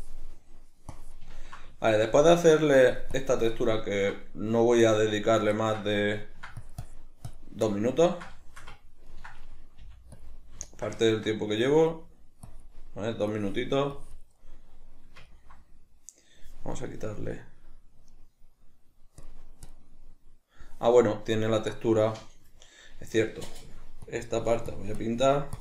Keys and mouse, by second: 0.3-0.9 middle drag, 0.9-1.3 drag, 1.3-2.8 ctrl+middle drag, 2.8-3.6 drag, 3.6-6.6 ctrl+middle drag, 6.6-7.7 drag, 7.7-11.6 ctrl+middle drag, 9.8 f, 10.3 click, 11.6-14.4 drag, 14.4-19.2 middle drag, 19.2-23.7 drag, 24.1-25.6 drag.